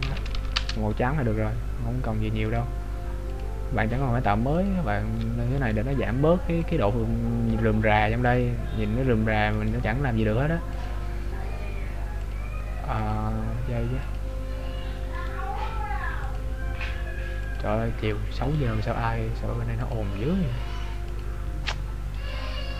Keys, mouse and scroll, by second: 2.6 right click, 3.5 click, 6.0 right click, 6.8 click, 9.9 right click, 11.0 click, 13.4 click, 15.5 right click, 16.6 click, 18.7 right click, 20.1 click, 22.4 right click.